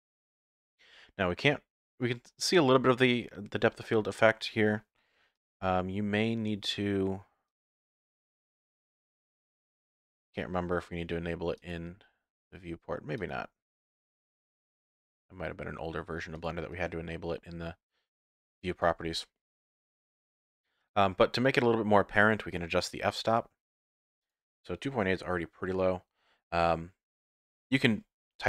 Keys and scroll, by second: 5.6 n, 18.9 n.